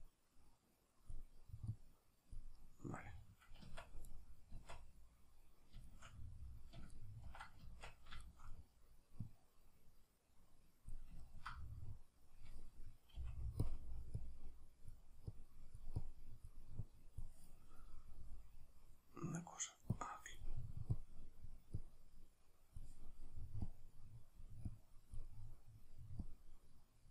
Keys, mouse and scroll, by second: 2.6-4.1 middle drag, 3.7 Tab, 4.1-4.5 right drag, 4.5 Tab, 4.5-9.3 middle drag, 7.7 Tab, 9.3-11.2 drag, 11.2-13.7 ctrl+middle drag, 13.2 f, 13.7 click, 17.8-19.9 middle drag, 19.9-25.3 drag, 25.3-26.3 middle drag, 26.3-27.1 drag.